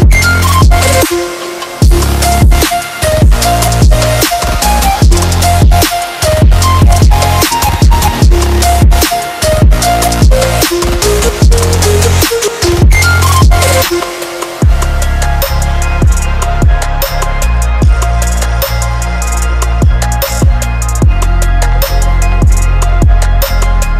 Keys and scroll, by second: 0.0-1.2 typing, 1.5 Escape, 5.2 Up, 6.4-6.9 typing, 10.4 Down, 14.3 Down, 17.7 Down, 20.1 shift+4, 21.2 5, 21.2 0, 22.2 Escape.